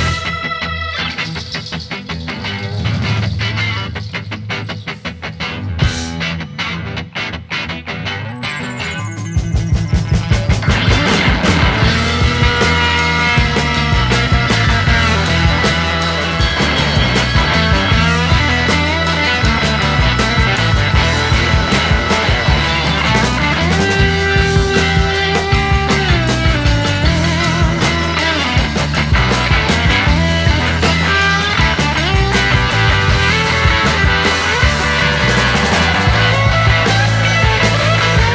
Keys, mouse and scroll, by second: 4.2 alt+right click, 4.4 alt+right click, 4.8 alt+right click, 33.7 alt+right click, 33.9 alt+right click, 37.3 alt+right click.